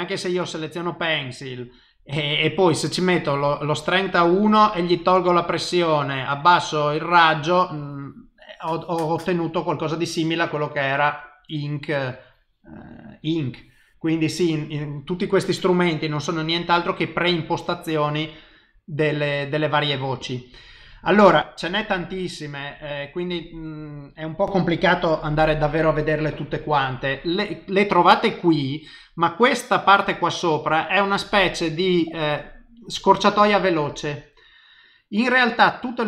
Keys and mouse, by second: 0.8 click, 2.9 click, 5.7 click, 7.4 click, 7.8 click, 8.7 click, 12.1 click, 15.6 click, 23.4 click.